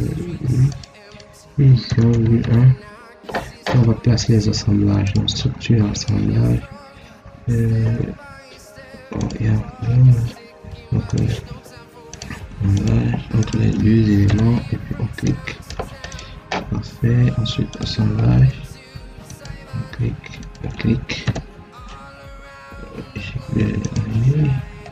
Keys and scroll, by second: 1.7 0, 2.0 ., 2.3 1, 21.1 Return.